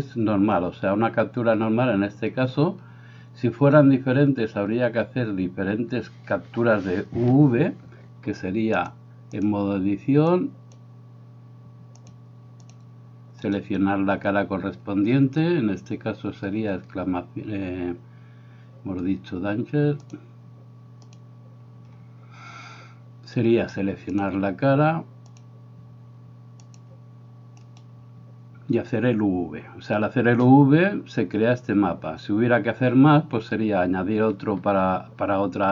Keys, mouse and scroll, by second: 8.7 click, 9.3-10.9 drag, 12.0 click, 20.1 click, 24.1-25.6 drag, 26.6 click, 27.7-33.0 right drag.